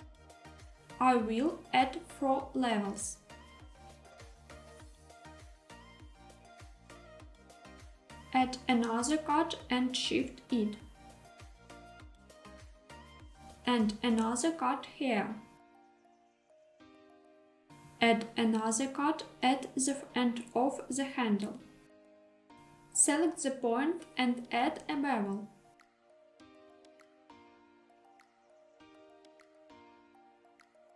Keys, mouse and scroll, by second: 0.0 click, 2.4 click, 3.3 click, 4.9 click, 5.9 alt+z, 8.7 ctrl+r, 13.0 click, 13.8 ctrl+r, 16.9 click, 18.2 ctrl+r, 20.7 click, 22.7 scroll up 2, 22.9 shift+middle click, 24.0 click, 26.4 ctrl+shift+b, 30.1 click.